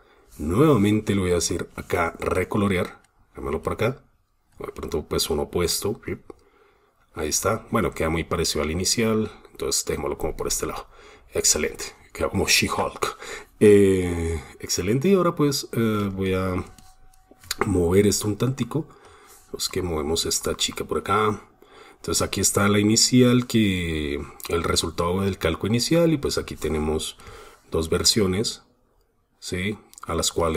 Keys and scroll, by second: 16.3 super+space.